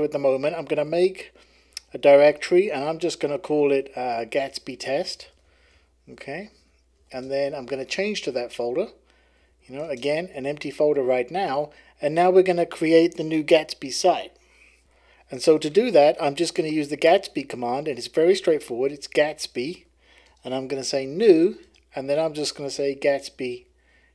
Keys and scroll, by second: 0.5-2.3 typing, 4.1-10.6 typing, 12.5-13.2 typing, 18.6-24.1 typing.